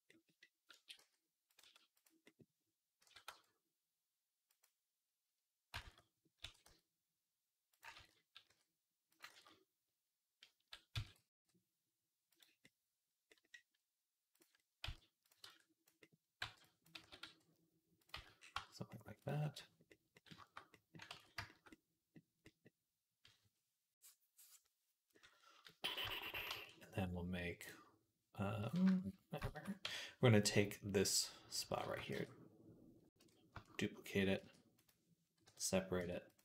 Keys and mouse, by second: 0.6 a, 0.8 s, 1.4-5.6 middle drag, 1.4 s, 2.9 s, 5.7 ctrl+z, 6.3 s, 7.8 ctrl+z, 8.3 s, 9.2 ctrl+z, 10.8-27.5 middle drag, 10.8 s, 14.2 click, 14.7 z, 15.3 b, 16.2 b, 16.8 s, 18.0 z, 18.4 Tab, 21.0 ctrl+s, 26.3 shift+a, 27.5-28.5 drag, 29.2 shift+middle click, 29.7 Tab, 30.9 click, 32.0 shift+s, 33.0 ctrl+z, 33.1-36.0 shift+middle drag, 34.2 shift+d, 35.3 p, 35.8 Tab, 36.1 click.